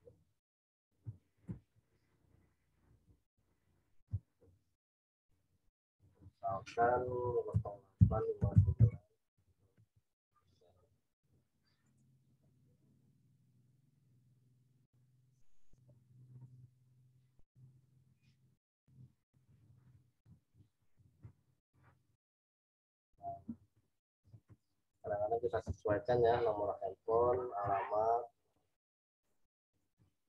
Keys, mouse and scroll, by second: 1.4 Return, 1.7 Down, 3.0 Left, 4.0 t, 5.3 click, 7.5-7.9 typing, 11.8 click, 16.4 ctrl+t, 17.7 alt+shift+click, 20.2 Return, 20.5 Left, 24.2 z, 24.5 alt+click, 28.7 v, 29.1 right click, 29.6 click.